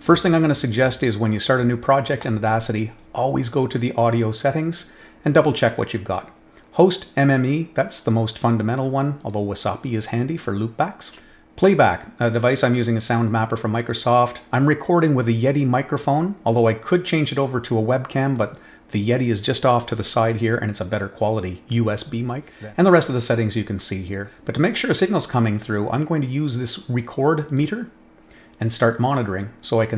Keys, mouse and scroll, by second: 2.2 click, 3.5 click, 7.9 click, 9.1 click, 14.9 click, 18.2 click, 23.5 click, 27.4 click, 28.8 click.